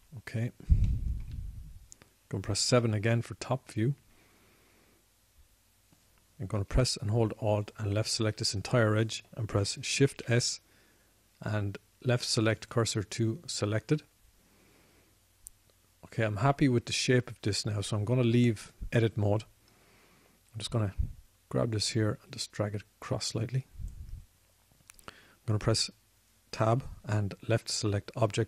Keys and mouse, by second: 0.5-3.9 drag, 3.9 KP_7, 11.5 shift+s, 14.2 shift+s, 23.0-24.4 drag, 27.0-28.4 drag, 28.0 Tab.